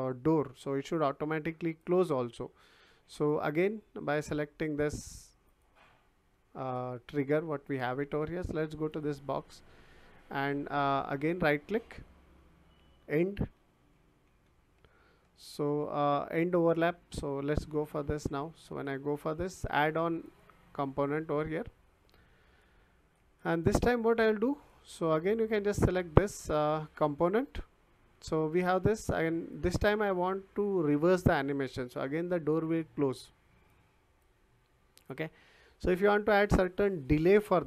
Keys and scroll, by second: 13.3-14.8 typing.